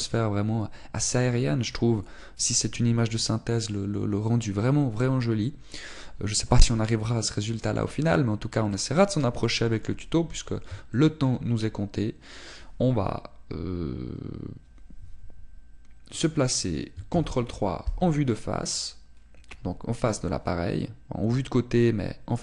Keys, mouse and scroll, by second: 8.5 middle click, 9.2-9.6 scroll down 4, 9.6 middle click, 11.9 shift+middle click, 12.4-12.8 scroll up 2, 18.1 ctrl+KP_3.